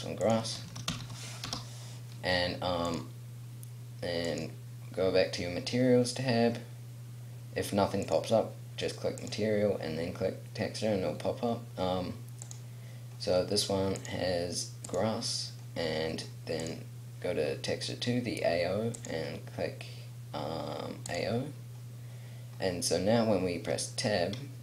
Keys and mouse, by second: 1.0 s, 12.4-16.6 middle drag, 16.6-22.3 drag.